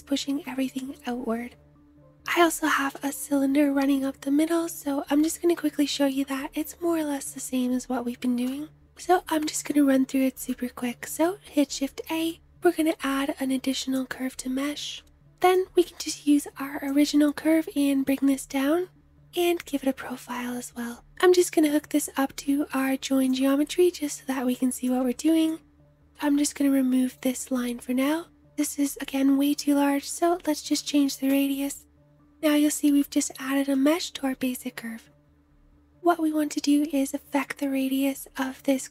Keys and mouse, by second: 2.0 space, 10.3-15.4 shift+drag, 10.8 shift+a, 15.4 ctrl+z, 15.4-19.3 middle drag, 19.3 click, 19.6-38.9 middle drag.